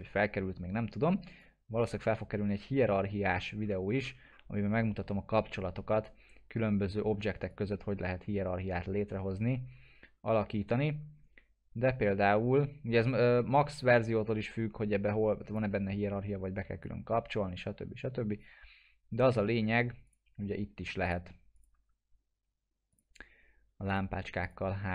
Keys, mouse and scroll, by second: 2.9 scroll up 1, 7.5-15.6 drag, 21.0 ctrl+click.